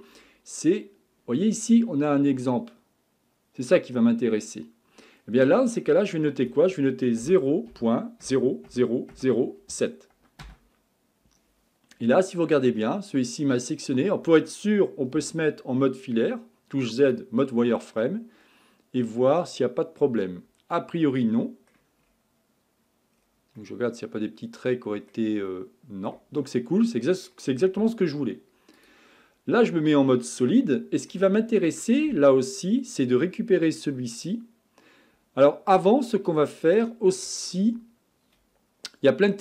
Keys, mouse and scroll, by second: 6.0-9.1 drag, 11.9-15.0 middle drag, 15.2 z, 17.6-20.6 middle drag, 22.0 scroll up 5, 23.1-23.6 scroll down 3, 23.6-26.4 middle drag, 26.4-27.1 scroll down 4, 27.1 middle click, 27.8 z, 29.2-30.6 scroll up 4, 30.6-31.5 shift+middle drag, 31.5-32.8 scroll down 2, 35.4-35.8 scroll down 3, 35.8-38.9 middle drag.